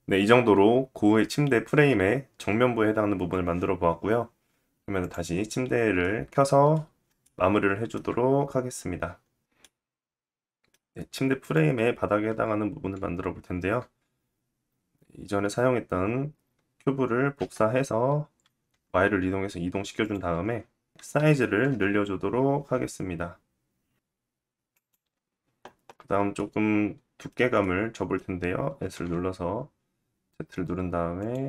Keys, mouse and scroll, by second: 4.7 click, 6.0 middle click, 6.3 scroll down 1, 6.8-11.0 shift+middle drag, 7.9-8.6 scroll up 2, 11.0 click, 11.1-23.7 middle drag, 16.9 shift+d, 20.9 s, 25.9 middle click, 28.3 s, 31.2 middle click.